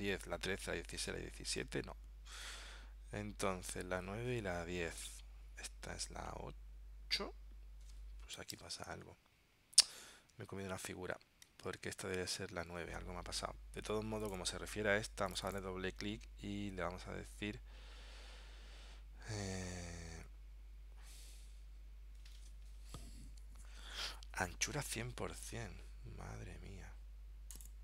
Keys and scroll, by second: 8.7 super+Tab, 11.8 super+Tab.